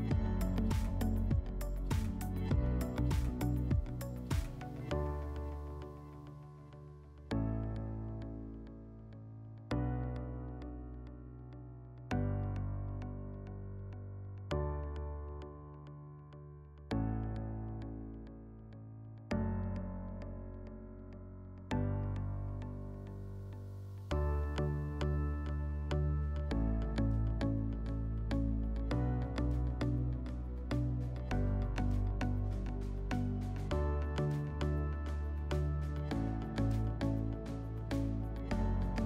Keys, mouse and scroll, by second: 7.2 click, 10.7-11.8 drag, 21.9-26.6 middle drag, 32.4-39.0 middle drag.